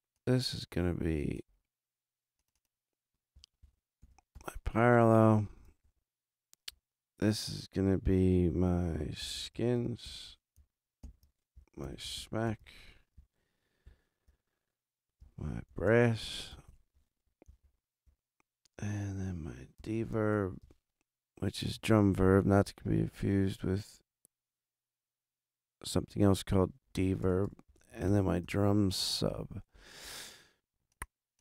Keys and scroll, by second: 3.3-4.8 typing, 5.8 super+Down, 8.9-10.5 typing, 11.0 shift+super+Down, 11.5 shift+super+Down, 11.7-13.0 typing, 13.1 shift+super+k, 13.8 shift+super+Down, 15.4-16.9 typing, 17.4 shift+super+s, 17.6 shift+super+Down, 19.5-21.1 typing, 22.6 shift+super+Down, 26.9-28.5 typing.